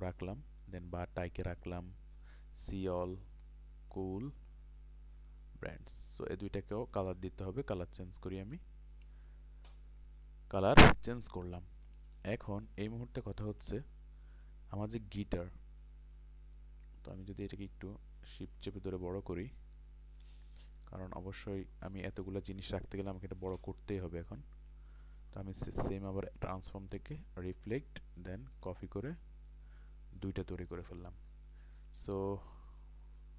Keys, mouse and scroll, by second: 4.3 scroll down 1, 5.3 click, 7.5 i, 8.4 click, 12.5 ctrl+space, 12.6 click, 13.4-20.2 ctrl+drag, 20.4 click, 23.0 Delete, 24.4 click, 25.4 right click, 26.2-30.7 drag, 30.9-33.3 drag.